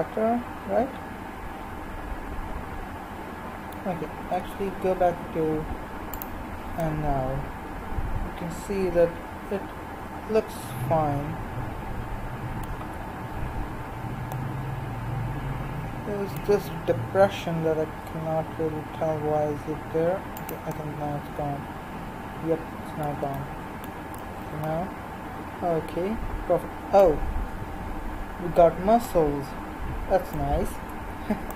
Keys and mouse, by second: 4.4 Tab, 6.2 click, 6.9-10.4 middle drag, 12.8 Tab, 18.0 g, 24.1 Tab, 31.0 Tab.